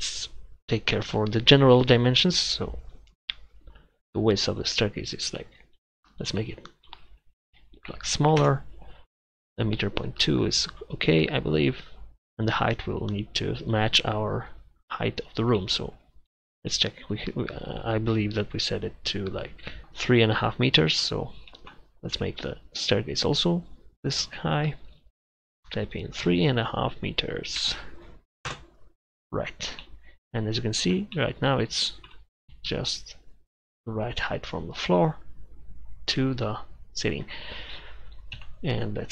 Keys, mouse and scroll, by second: 16.9-19.8 middle drag, 20.4-21.1 middle drag, 22.2 Page_Down, 22.2 KP_7, 31.8-32.5 middle drag, 32.5 KP_1, 38.4 KP_7.